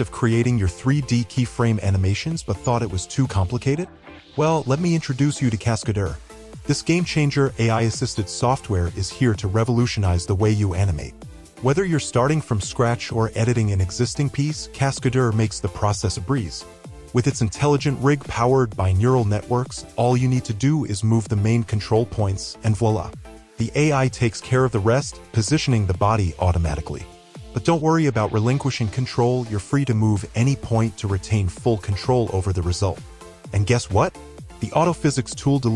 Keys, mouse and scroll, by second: 0.3 alt+middle click, 6.8 w, 21.3 click, 21.4 right click, 23.3 shift+z, 23.9 shift+z, 26.0 shift+click, 28.1 e, 30.8 shift+z, 31.4 shift+z.